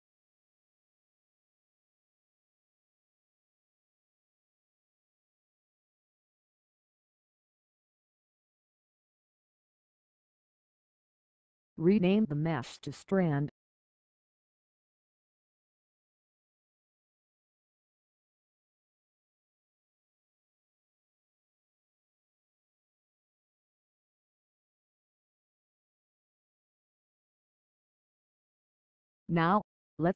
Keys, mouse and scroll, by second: 0.0 scroll down 1, 3.9 click, 7.8 click, 8.6 Pause, 9.6 click, 19.6 click, 23.1 Pause.